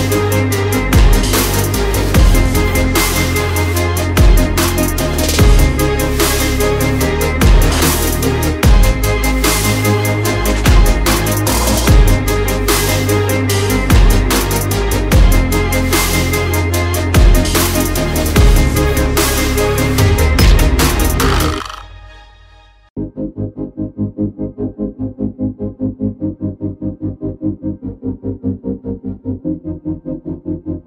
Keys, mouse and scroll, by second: 1.8 alt+click, 3.1 click, 4.5 double click, 5.4 click, 6.6 alt+scroll down 1, 7.1 alt+scroll, 7.2 alt+scroll up 1, 8.0 scroll down 1, 8.8 click, 11.9 double click, 12.5 click, 13.8 click, 20.9 click, 22.1 right click, 22.7 click, 25.4-25.9 alt+scroll, 26.2-26.7 alt+scroll up 1, 26.7 click.